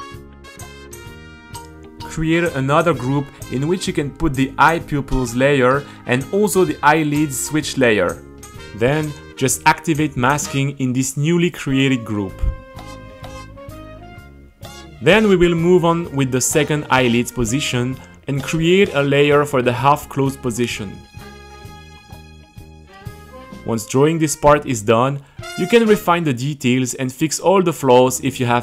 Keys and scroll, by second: 3.3 shift+e, 3.6 Return, 4.2 Return, 9.2 super+,, 9.5 super+., 15.5-19.2 typing, 18.1 Return, 21.4-22.4 typing, 23.4 super+r, 27.7 q, 28.0 h.